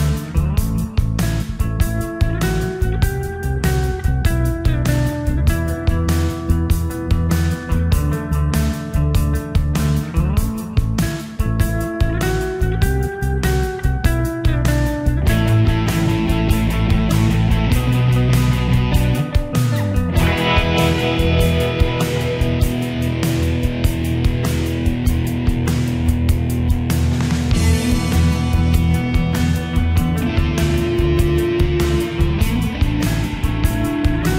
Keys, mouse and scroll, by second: 13.2 right click, 16.6 click, 23.2 F12, 26.2 click.